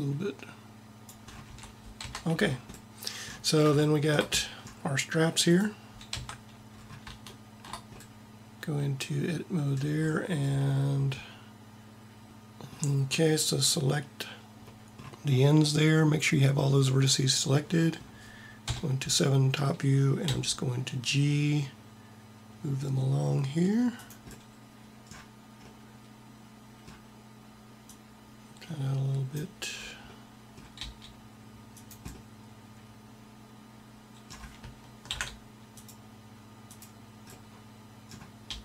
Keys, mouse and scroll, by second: 1.5 a, 2.2 Tab, 6.1 Tab, 12.3 ctrl+z, 18.5 KP_7, 18.7 KP_7, 20.3 g, 28.1-29.2 drag, 30.6 g, 35.0 ctrl+r, 38.3 g.